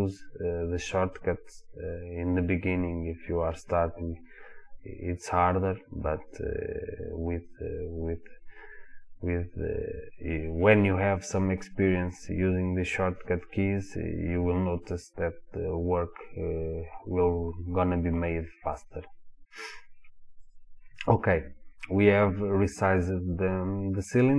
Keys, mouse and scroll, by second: 4.0 click, 20.5 click, 21.6 scroll up 1, 23.1 click.